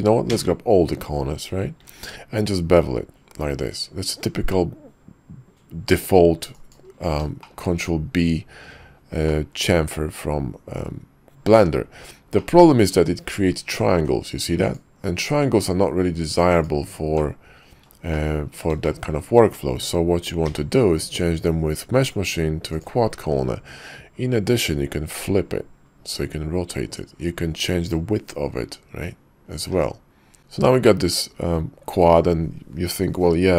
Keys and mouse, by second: 0.3 a, 1.8 ctrl+b, 7.5 shift+click, 9.3-11.7 middle drag, 12.4 shift+middle click, 15.4 Tab, 16.5 click, 17.2 click, 18.1 shift+click, 18.8 shift+click, 20.4 y, 30.4 Tab, 30.4 ctrl+z, 30.8-31.1 drag.